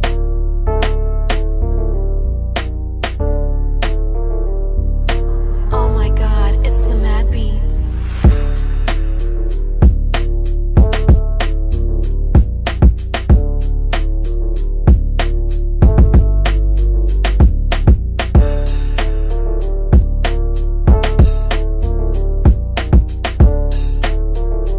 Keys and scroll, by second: 14.3 5, 14.6 0, 15.2 shift+5, 22.1 shift+F2, 22.3 F3.